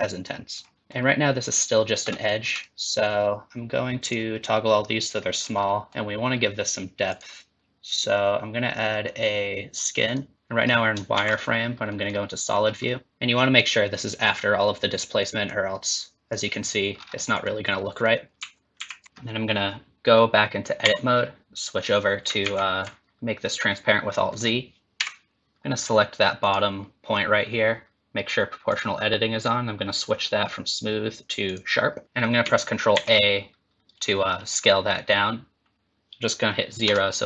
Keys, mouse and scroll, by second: 0.7 middle click, 0.7 scroll down 4, 2.0-2.8 scroll up 36, 4.0 click, 5.4 scroll up 3, 5.6 middle click, 7.1 click, 10.3 middle click, 11.1 shift+z, 11.9 middle click, 12.5 scroll up 2, 12.8 middle click, 13.1 ctrl+z, 15.4 click, 16.9 scroll down 4, 17.1 middle click, 17.8 middle click, 18.7 ctrl+z, 20.8 Tab, 21.4 middle click, 22.4 alt+z, 24.2 middle click, 24.9 KP_1, 26.4 click, 28.7 click, 29.4 click, 32.9 ctrl+a.